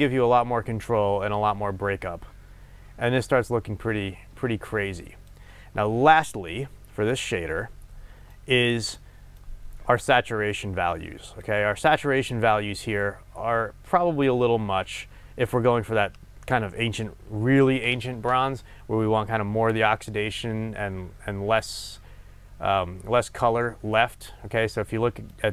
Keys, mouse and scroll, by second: 6.8-8.3 scroll down 1, 10.6 click.